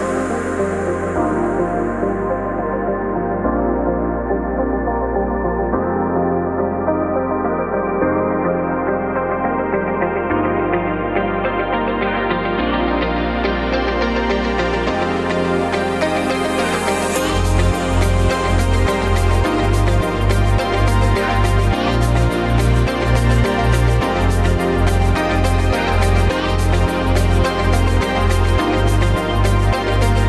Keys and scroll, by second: 0.5-1.5 typing, 2.7-4.3 typing, 4.0 Return, 5.4-6.1 typing, 6.7 Escape, 7.2 ctrl+shift+g, 9.4 ctrl+t, 10.0 v, 11.4 ctrl+t, 20.8 ctrl+a, 24.5 ctrl+t.